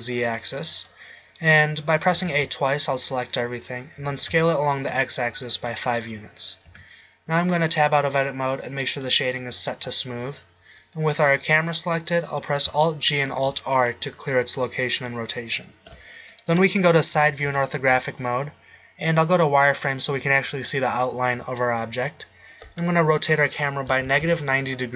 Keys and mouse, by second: 2.3 a, 2.5 a, 4.2 s, 6.9 Tab, 13.2 alt+g, 13.5 alt+r, 17.3 KP_3, 17.6 KP_5, 23.5 r.